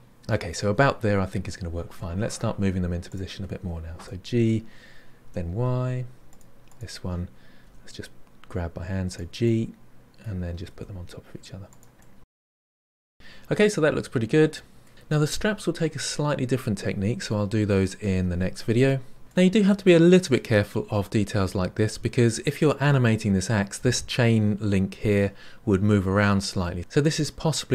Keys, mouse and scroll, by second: 3.0 click, 4.0 g, 6.7 click, 7.6 g, 9.4 middle click, 10.1 g, 10.3 middle click, 10.5 g, 10.7 middle click, 11.3 middle click, 11.4 shift+click, 11.6 middle click, 12.2 middle click, 12.9 scroll down 5, 13.0-14.9 shift+middle drag, 19.2-24.0 middle drag.